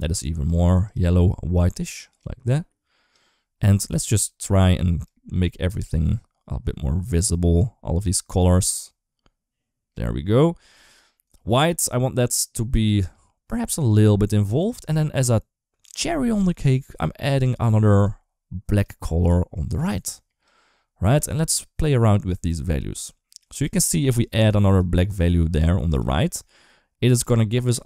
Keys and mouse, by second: 0.6 click, 3.9 click, 4.9-8.2 drag, 8.5-9.8 drag, 11.1-13.7 drag, 14.6 click, 16.1-17.2 drag, 17.8-18.6 drag, 19.0 click, 21.6-22.8 drag, 23.2 click, 23.7 click, 24.3 click, 25.0 click, 26.1-27.8 drag.